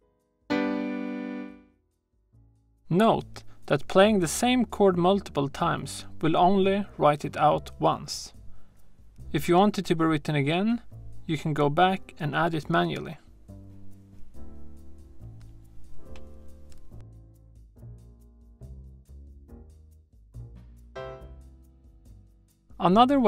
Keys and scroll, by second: 14.5 shift+a, 15.5 shift+m, 16.1 7, 22.2 shift+super+a, 23.1 BackSpace.